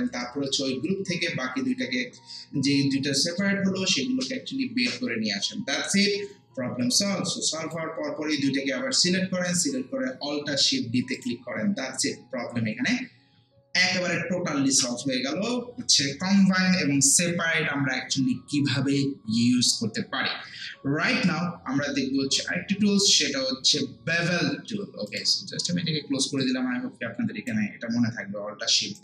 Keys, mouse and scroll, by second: 7.1-11.1 drag, 25.1-29.0 drag.